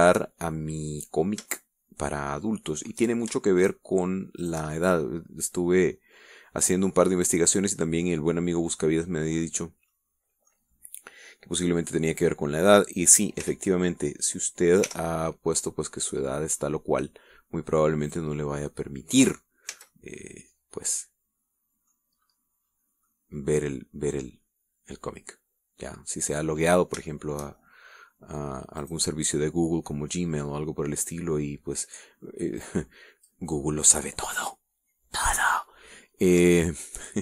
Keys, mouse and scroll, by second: 0.9 shift+click, 1.4-3.5 shift+middle drag, 3.8 shift+middle click, 4.8 shift+right click, 5.6 shift+right click, 5.9-7.5 shift+middle drag, 7.6 scroll down 1, 8.4-10.7 middle drag, 10.8 scroll down 2, 11.1 middle click, 14.6 s, 16.0 y, 17.0-18.0 scroll down 4, 19.3 click, 19.7-20.7 middle drag, 20.9 a, 21.1-23.3 middle drag, 23.3-23.8 scroll up 1, 24.3-27.8 middle drag, 27.9 scroll up 1, 28.3 shift+middle click, 28.8 shift+middle click, 30.0 right click, 30.4-32.7 middle drag, 30.8 g, 33.9 click.